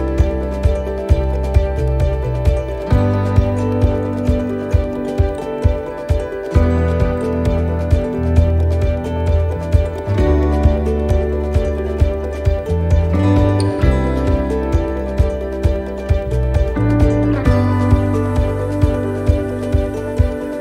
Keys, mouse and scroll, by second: 2.5-3.0 scroll up 4, 2.9 shift+middle click, 3.4-4.6 scroll down 2, 4.8 s, 11.1 shift+middle click, 11.5 scroll down 1, 12.1 shift+middle click, 12.1 scroll down 3, 12.4 scroll up 1, 13.1-13.7 scroll down 1, 15.0 shift+d, 16.9 click, 19.9-20.5 scroll down 1, 20.5 click.